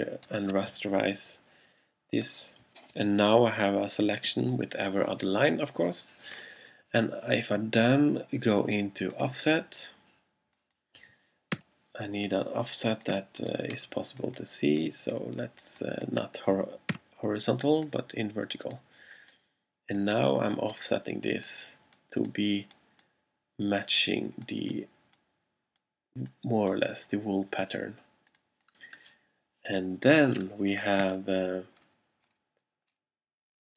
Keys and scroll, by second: 11.6 0, 13.2 0, 17.0 0.